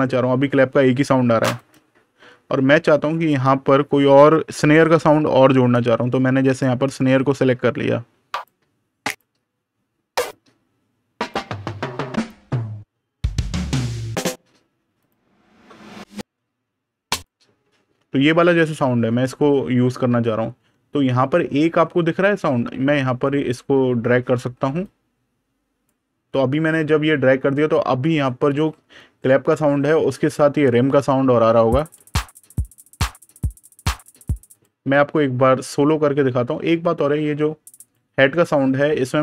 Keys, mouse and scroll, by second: 1.4 click, 6.3 click, 6.5 super+KP_Add, 7.5-8.2 scroll down 1, 8.2 click, 9.4-10.0 scroll down 1, 10.0 click, 11.4-12.0 scroll down 1, 12.0 click, 12.6 scroll down 1, 13.1 click, 13.5 scroll down 1, 14.0 click, 14.4-14.8 scroll down 1, 14.8 click, 16.3-17.0 scroll down 1, 17.0 click, 17.7 super+KP_Subtract, 19.3 scroll down 1, 20.5 super+KP_Add, 24.7 click, 26.3 super+KP_Subtract, 31.7 click, 37.6 click.